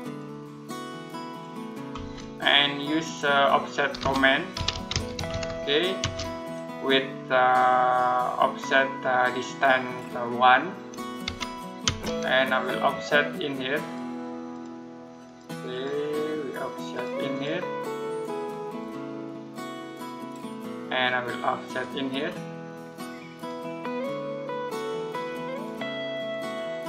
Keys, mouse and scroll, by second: 2.2 middle click, 3.8-5.8 typing, 11.1 1, 11.7 space, 13.6 click.